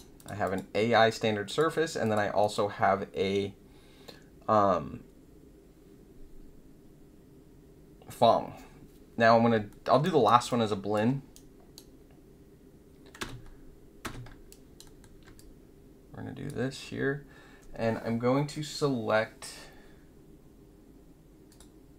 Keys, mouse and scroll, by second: 0.1 click, 0.4 click, 1.4 click, 2.0 click, 2.4 click, 9.6 alt+middle click, 10.0 alt+right click, 10.4 alt+click, 11.4-11.7 right drag, 13.1 space, 14.0 space, 14.4 alt+right click, 14.8 alt+middle click, 15.3-16.4 drag, 18.5 scroll down 2, 21.4 click.